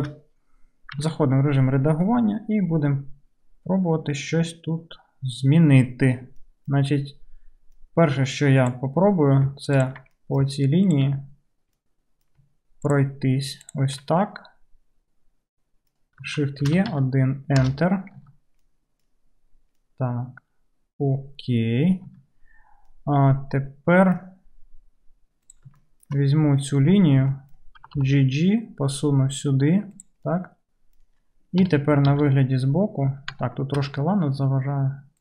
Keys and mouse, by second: 1.0 Tab, 1.0-3.0 middle drag, 3.0-10.4 right drag, 8.2 2, 9.8 ctrl+click, 9.8 ctrl+middle click, 10.4-12.9 ctrl+drag, 12.9 ctrl+middle click, 13.0 ctrl+right click, 13.6 ctrl+middle click, 13.8-15.8 ctrl+right drag, 15.8-20.4 drag, 16.6 shift+e, 18.2 Tab, 20.4-25.8 right drag, 22.1 Tab, 25.8 shift+middle click, 26.3 right click, 26.4 middle click, 26.6 right click, 26.7 middle click, 26.8 right click, 27.5 middle click, 27.5 right click, 27.6-30.1 drag, 27.8 g, 30.1 middle click, 30.5 right click, 30.9-34.8 drag, 31.6 KP_3, 32.2 alt+z, 34.8-35.2 right drag.